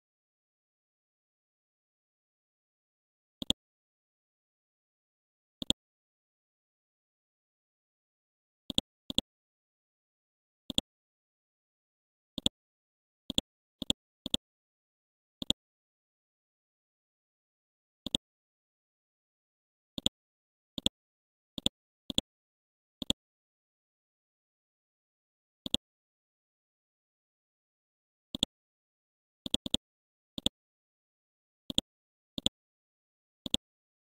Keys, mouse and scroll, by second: 3.4-7.0 drag, 10.7 shift+click, 12.3 click, 13.3 right click, 13.8 click, 24.6 3, 25.7-34.0 drag, 34.0-34.1 scroll up 1.